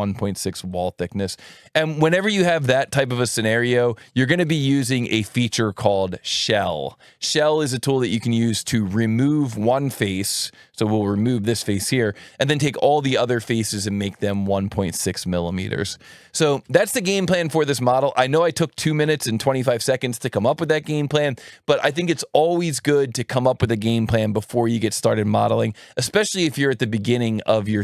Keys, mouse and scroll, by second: 0.7 click, 3.5 click, 5.2 shift+l, 7.3 click, 8.7 right click.